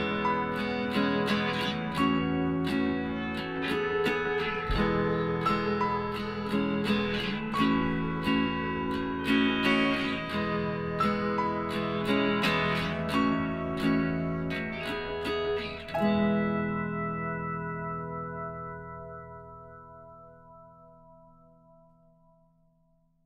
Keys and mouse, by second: 0.8-2.5 drag, 1.2-3.2 right drag, 2.7 middle click, 3.2-5.1 middle drag, 5.1 e, 8.9 middle click, 9.0-10.5 drag, 10.5 ctrl+r, 12.2 ctrl+r, 13.7 right click, 14.4 middle click, 15.2 KP_1, 15.3 right click, 15.7 z, 17.6 g.